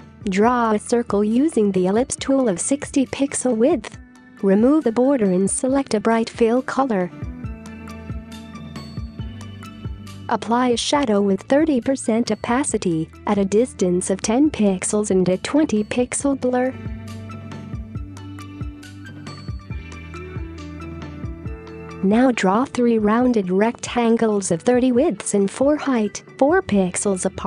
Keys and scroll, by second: 2.3-2.6 typing, 3.0 Return, 6.4 v, 7.9 Down, 14.0-14.4 typing, 15.4 Return, 18.8 typing, 21.3 typing, 21.7 Return, 26.9 typing.